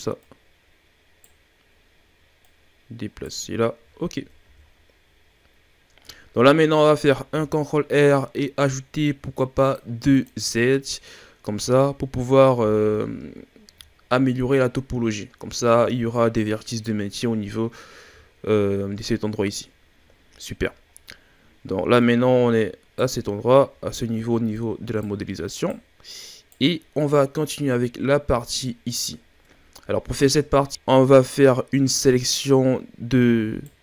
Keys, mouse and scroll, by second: 0.2-1.2 right drag, 1.7-2.4 scroll up 2, 2.4 right click, 3.5-4.4 scroll down 4, 4.4 a, 4.7-5.3 scroll down 3, 5.3-6.0 scroll down 6, 6.0-6.8 scroll up 10, 7.3 ctrl+r, 11.2-11.6 scroll up 1, 11.6 a, 11.8-12.1 scroll down 4, 12.6-13.5 scroll down 2, 13.5-13.9 scroll down 3, 13.9-14.4 shift+scroll up 3, 14.9-16.0 scroll up 3, 16.3-17.0 shift+scroll down 7, 17.7-18.2 scroll down 1, 18.2-18.7 shift+scroll up 1, 19.7-22.0 ctrl+scroll up 6, 22.0 right click, 23.7-24.0 ctrl+scroll down 4, 24.0-24.5 scroll up 2, 24.5 right click, 25.4 right click, 26.1 right click, 27.3-28.0 scroll down 2, 28.0-29.2 scroll down 5, 29.2-29.9 ctrl+scroll up 6, 30.4-30.7 scroll up 2, 32.2 right click.